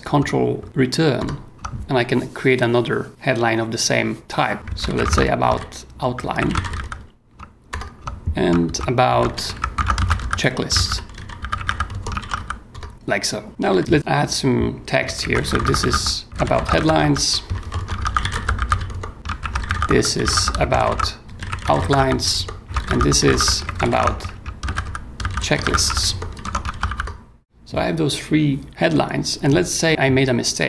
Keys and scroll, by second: 1.2 ctrl+Return, 4.3-7.2 typing, 7.4 ctrl+e, 7.7 ctrl+Return, 8.5 ctrl+shift+Return, 8.6 ctrl+shift+a, 9.0-27.3 typing.